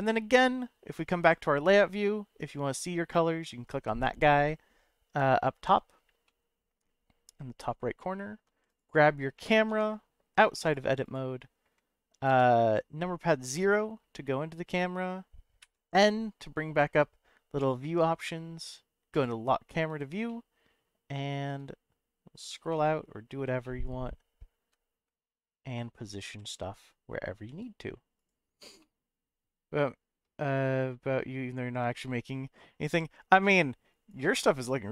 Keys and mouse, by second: 0.0 click, 2.4 click, 6.2 middle click, 8.7 click, 9.7 Tab, 10.7 click, 11.0 click, 12.3 KP_0, 15.6 n, 17.6 click, 19.1 click, 20.2-21.5 shift+middle drag, 22.7-23.3 middle drag, 23.6-24.4 middle drag, 26.4 n, 27.5 n, 28.1 click, 28.8-30.2 middle drag.